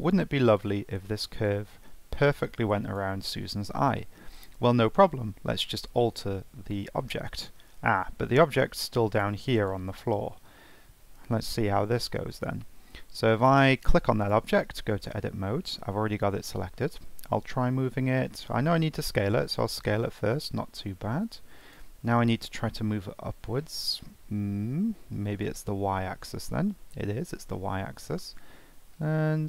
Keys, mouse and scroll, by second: 0.5-3.9 drag, 3.9-4.4 scroll down 3, 6.0 ctrl+z, 6.7 middle click, 7.1 scroll down 2, 7.3 scroll up 1, 7.4-8.8 middle drag, 8.8-11.3 drag, 11.3 ctrl+z, 11.6 ctrl+z, 13.4 click, 15.6-17.8 scroll down 1, 25.4 2.